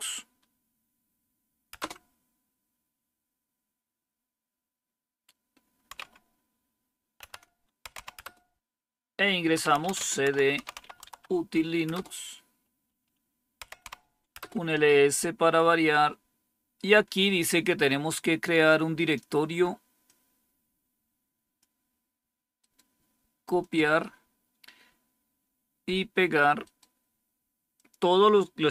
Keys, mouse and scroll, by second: 1.7 Return, 5.9 c, 7.7-11.5 typing, 11.8 Return, 13.3-14.1 typing, 14.3 Return, 20.0-22.2 drag, 22.5 right click, 23.5 click, 26.6 right click, 27.7-28.7 drag.